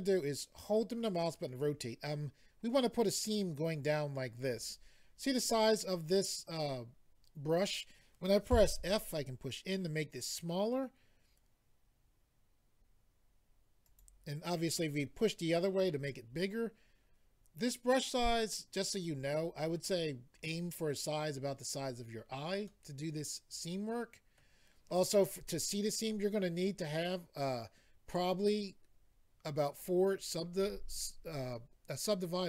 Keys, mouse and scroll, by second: 13.9 click, 14.0 click, 18.3 middle click, 22.7 middle click.